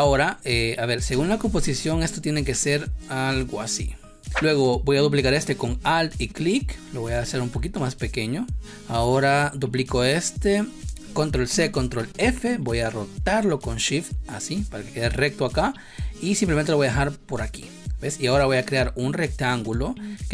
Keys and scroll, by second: 11.3 ctrl+c, 11.8 ctrl+f.